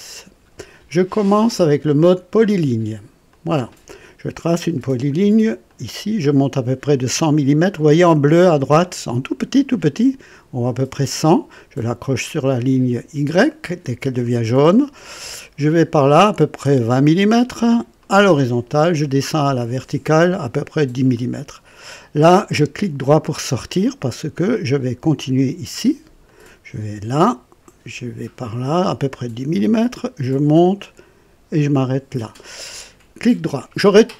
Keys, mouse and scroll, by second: 3.3 click, 5.6 click, 13.8 click, 18.0 click, 21.1 click, 22.7 right click, 26.2 click, 29.5 click, 31.7 click, 33.2 right click.